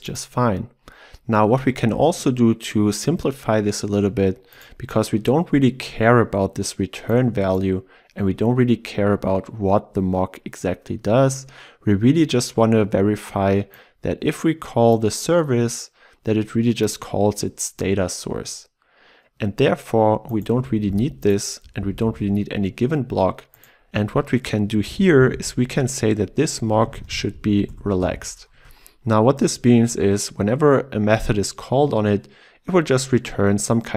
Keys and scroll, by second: 20.9 ctrl+x, 26.3 Return, 31.8 Escape.